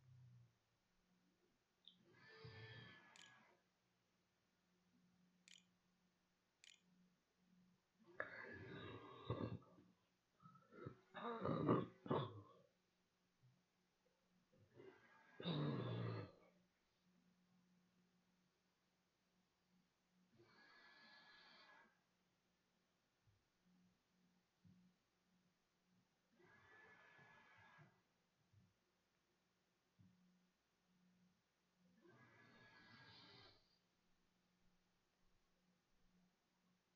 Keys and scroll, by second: 2.3-5.0 typing, 5.8 ctrl+z, 6.4 ctrl+s, 6.8 a.